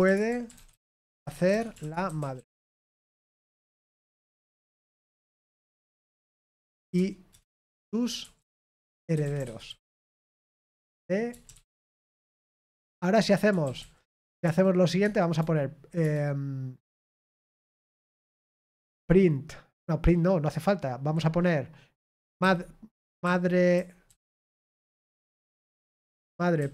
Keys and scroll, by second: 0.0-15.8 typing, 15.0 Tab.